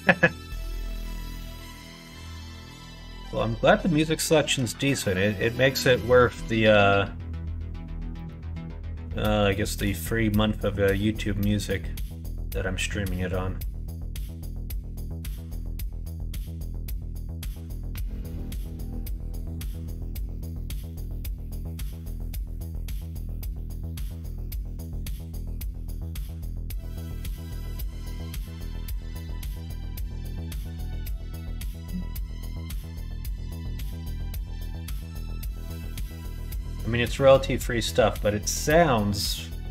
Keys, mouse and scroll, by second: 0.0 middle click, 1.6 click, 2.0 Tab, 2.6 middle click, 4.0 middle click, 4.7 middle click, 8.0 middle click, 9.1 middle click, 9.7 middle click, 11.2 middle click, 12.0 middle click, 12.9 middle click, 13.5 middle click, 15.2 Tab, 15.9 middle click, 16.1 q, 18.3 middle click, 19.1 middle click, 19.9 middle click, 21.1 q, 22.9 q, 30.3-33.3 drag, 34.8 alt+z, 35.3 middle click, 36.4 click, 38.4 click.